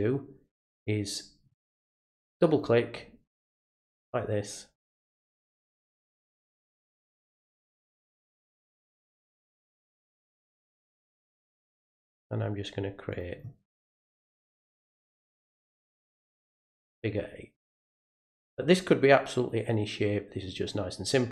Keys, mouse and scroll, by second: 2.2 click, 2.5 click, 3.5 click, 3.7 click, 4.7 click, 4.9 click, 5.7 click, 5.9 click, 6.5 click, 6.7 click, 7.3 click, 7.5 click, 8.2 click, 8.4 click, 9.0 click, 9.3 click, 10.5 click, 10.8 click, 11.6 click, 11.8 click, 13.1 click, 13.3 click, 14.5 click, 14.7 click, 15.5 click, 15.7 click, 16.3 click, 16.5 click, 17.5 click, 17.7 click, 18.3 click, 18.5 click, 19.4 click, 19.6 click, 20.5 click, 20.6 click.